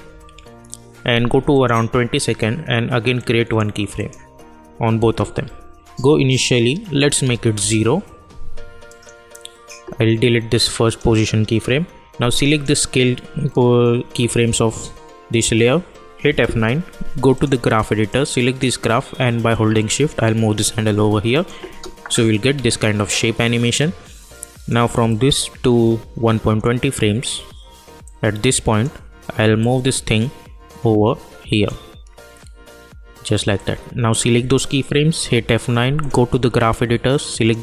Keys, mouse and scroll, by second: 0.0 =, 0.3 =, 1.5 click, 5.4 j, 6.9 click, 7.5 Return, 8.8 click, 16.3 F9, 17.3-21.3 drag, 21.6 space, 23.7-33.5 drag, 33.5-35.1 drag, 35.1 F9, 36.0-37.6 drag.